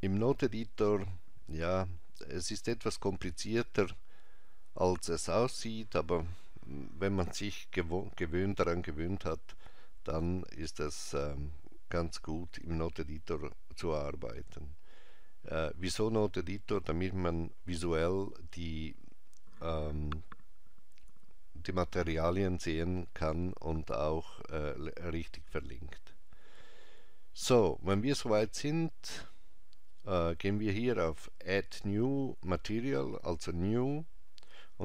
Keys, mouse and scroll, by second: 1.7-3.6 scroll down 2, 3.6 click, 33.7 click.